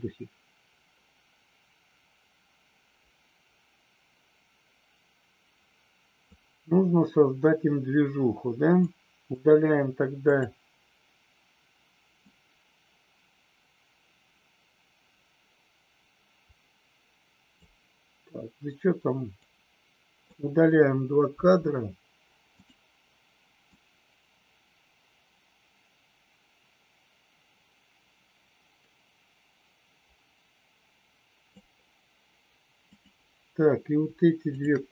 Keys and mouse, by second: 8.8 click, 10.1 click, 12.3 click, 19.4 click, 21.3 Delete, 22.5 click, 23.7-31.5 drag, 32.9 click, 34.5 shift+click.